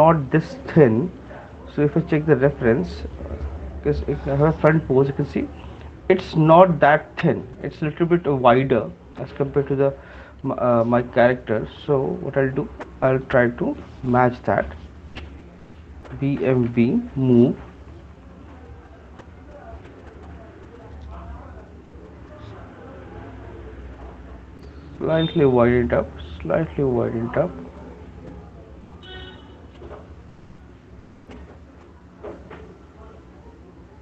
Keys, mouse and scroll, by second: 0.3 click, 1.4 click, 2.2 click, 2.6 click, 5.3 click, 10.5 click, 12.5 shift+click, 14.2 alt+click, 16.7-17.3 typing, 25.2 click, 28.1 middle click, 31.1 middle click, 32.4 alt+click.